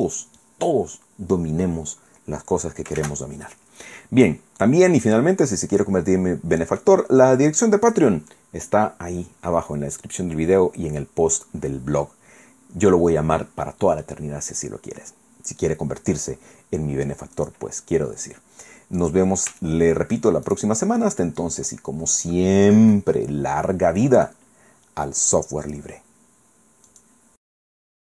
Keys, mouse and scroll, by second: 3.0 shift+z, 3.7-4.5 scroll down 4, 5.0-7.0 drag, 7.0-7.4 scroll up 1, 9.8-10.2 scroll down 1, 12.2-12.6 scroll up 1, 15.4-15.8 scroll down 1, 16.2-16.6 scroll up 1, 17.4 click, 19.0 click, 19.6 shift+middle click, 20.5 shift+right click, 21.6 click, 22.4-22.8 scroll down 2, 22.9-24.4 middle drag, 26.9 click.